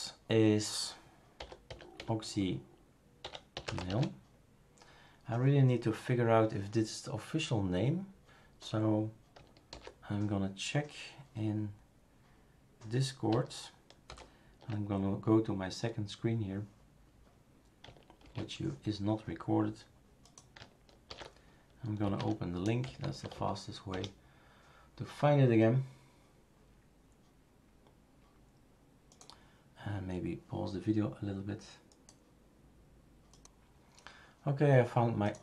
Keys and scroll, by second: 1.1-4.4 typing, 9.7 super+f, 14.1 super+F7, 18.2 shift+super+q, 21.1 shift+super+d, 21.8-23.8 typing, 23.9 Return.